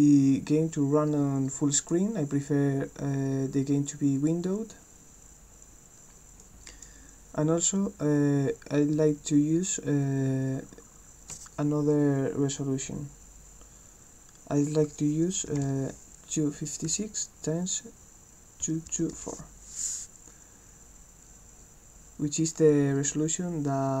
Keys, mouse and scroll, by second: 1.8 click, 6.4 click.